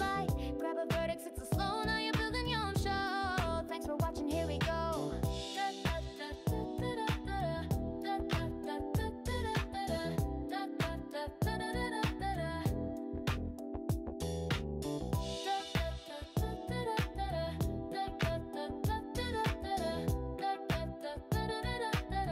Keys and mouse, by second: 3.5 click, 4.8 g, 7.0 click, 7.4 g, 8.2 click, 12.5 click, 13.1 g, 14.3 click, 15.2 click, 15.8 g, 16.8 click, 21.5 g.